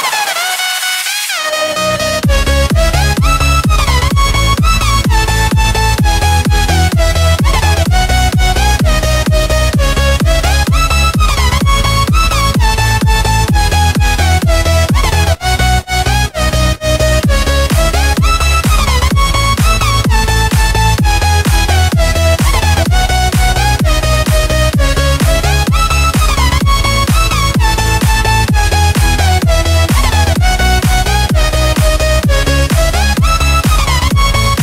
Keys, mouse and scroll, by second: 3.2-4.6 drag, 5.2 F10, 5.7 click, 9.0 KP_0, 9.5 Return, 10.5 click, 13.2-13.6 typing, 13.7 Return, 14.8 click, 19.1 right click, 23.1 click, 26.2-27.3 typing, 28.0 Escape, 28.2 click, 28.3 F10, 29.1 click, 29.9 right click, 31.0 i, 31.2 Return, 32.7 click, 33.0-34.6 typing.